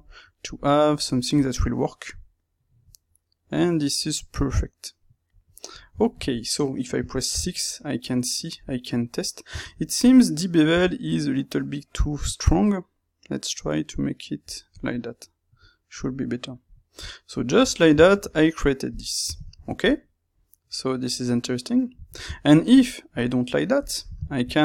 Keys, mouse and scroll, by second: 0.0-23.7 middle drag, 23.7 click, 24.2 ctrl+middle click.